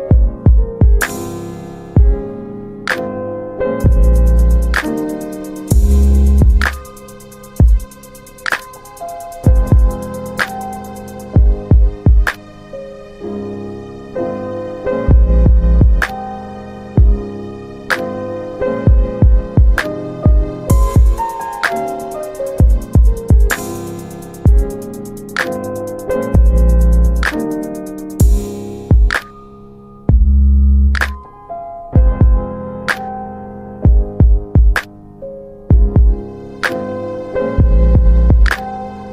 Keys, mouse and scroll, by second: 0.3-1.9 scroll up 1, 2.2 click, 3.1 double click, 3.3 click, 3.8 double click, 4.4 middle click, 4.5 scroll down 1, 4.9 alt+middle click, 10.3 alt+middle click, 10.4 click, 11.2 alt+middle click, 12.8-13.1 scroll up 1, 13.6 middle click, 15.2 click, 17.4 right click, 18.6 click, 19.0 double click, 19.2 click, 19.3 double click, 19.6 ctrl+click, 21.8 double click, 23.1 click, 26.1 alt+r, 28.1 click, 31.1 middle click, 32.1 alt+middle click, 33.7 ctrl+alt+middle click, 35.5 click, 36.8 alt+middle click.